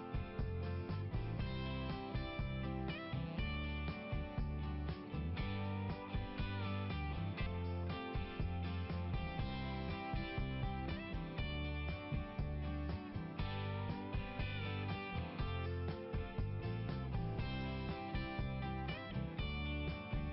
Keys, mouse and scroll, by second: 0.4 right click, 0.5 click, 0.6 right click, 0.8 right click, 1.6 click, 2.6 right click, 4.2 click, 12.5 click, 13.9 click, 17.9 click, 19.4 click.